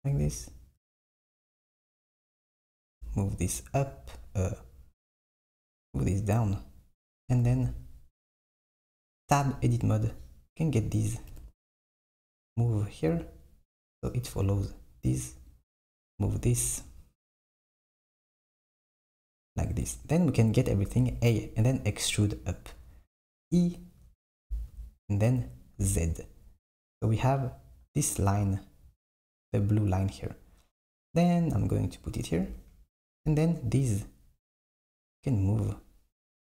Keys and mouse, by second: 0.2 KP_3, 2.9 g, 7.5 Tab, 9.4 click, 11.4 g, 15.3 click, 16.2 g, 21.0 a, 23.4 e, 35.5 click.